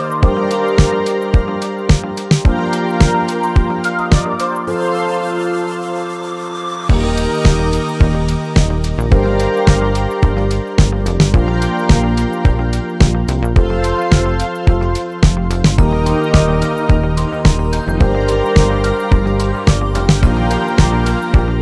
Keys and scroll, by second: 4.6-5.5 typing.